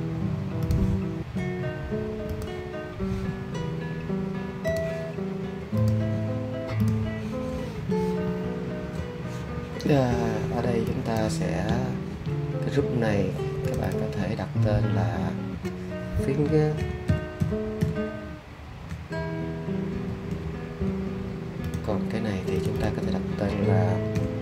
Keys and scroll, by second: 16.5-18.8 typing, 20.0 r, 24.1-24.4 typing.